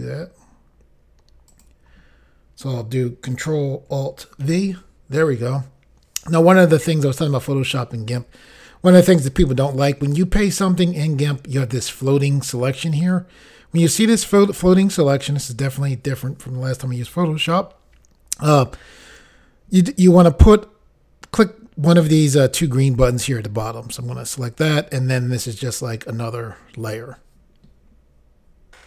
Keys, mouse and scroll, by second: 1.5 click, 4.4 ctrl+alt+v, 24.4 click.